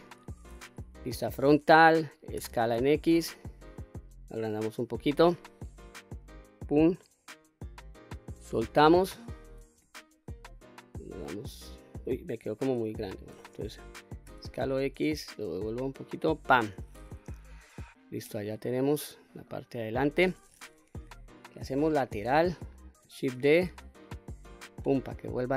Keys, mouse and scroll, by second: 0.9 KP_1, 2.4 s, 2.8 x, 6.2 click, 9.7 KP_3, 10.8-12.1 middle drag, 12.9 KP_1, 14.2 s, 14.6 x, 16.4 click, 17.2 KP_3, 18.2 middle click, 19.0-19.5 scroll down 2, 19.5 middle click, 21.7 KP_3, 23.3 shift+d, 24.7 right click.